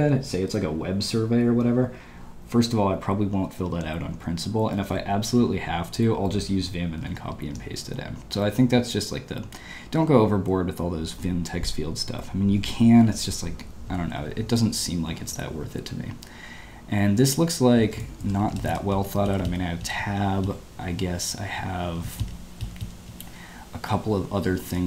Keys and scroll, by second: 7.2 ctrl+d, 17.8-20.4 typing, 21.6-24.0 typing.